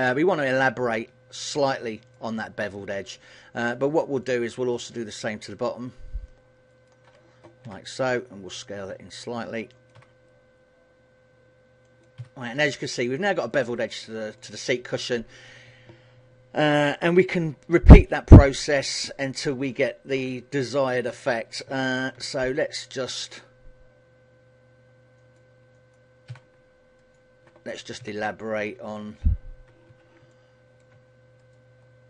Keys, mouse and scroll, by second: 0.6 KP_1, 1.4 shift+middle click, 4.0 alt+right click, 4.4 middle click, 5.6 alt+shift+right click, 6.8 alt+shift+right click, 7.8 s, 10.0 click, 10.2 s, 12.1 click, 12.3 a, 12.6 middle click, 14.0 scroll down 2, 14.5 middle click, 18.6 KP_1, 19.4-19.8 scroll up 4, 19.8 shift+middle click, 20.8 shift+middle click, 22.2 ctrl+r, 26.1 click, 26.4 a, 27.1 alt+right click, 28.2 s, 30.4 middle click, 31.6 alt+shift+right click.